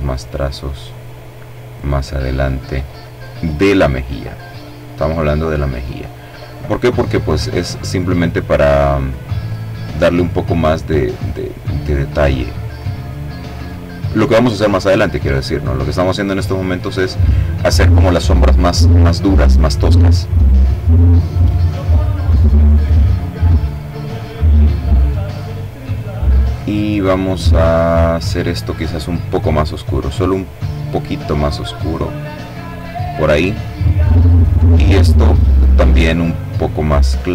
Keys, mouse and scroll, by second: 0.4 click, 2.0 click, 2.6-3.8 drag, 4.5-5.6 middle drag, 6.4 click, 7.6 click, 8.6 click, 9.2 click, 9.9 click, 10.6 click, 11.3 click, 12.4 middle click, 14.6 click, 15.4 click, 19.6 click, 21.1-23.1 drag, 26.7 click, 29.3-31.9 drag, 33.2 click, 35.8-37.3 drag.